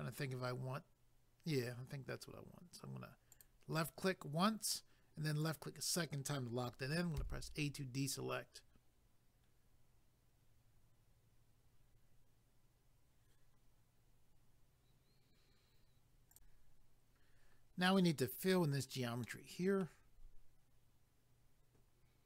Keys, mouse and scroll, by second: 3.3 click, 5.4 click, 7.2 a, 16.4 click, 19.3 middle click.